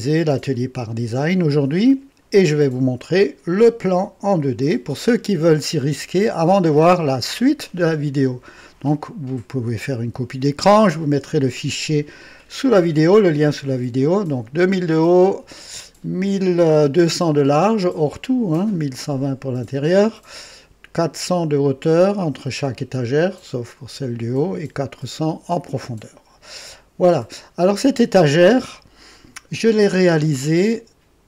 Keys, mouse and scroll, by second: 3.7 click, 27.1 click.